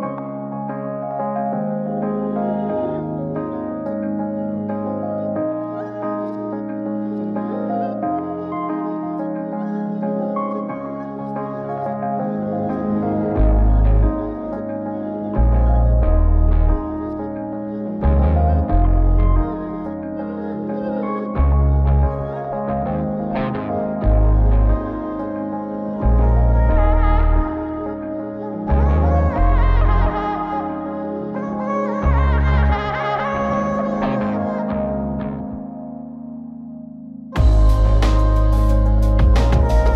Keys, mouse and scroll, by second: 0.5 ctrl+i, 1.4 x, 2.8 KP_7, 2.8 KP_5, 3.7-4.3 scroll down 2, 4.3 click, 5.0 scroll up 1, 5.7 shift+d, 6.7 shift+d, 8.3 d, 9.1 shift+z, 9.9 shift+d, 12.3 z, 13.5 shift+d, 16.2-17.0 middle drag, 18.7-20.3 middle drag, 20.3-21.8 drag, 22.1-24.5 middle drag, 25.5 click, 26.4 middle click, 27.6-31.8 drag, 33.3 click, 33.7-34.5 middle drag, 34.1 typing, 35.4-36.2 drag, 36.9 F9, 39.8-39.9 middle drag.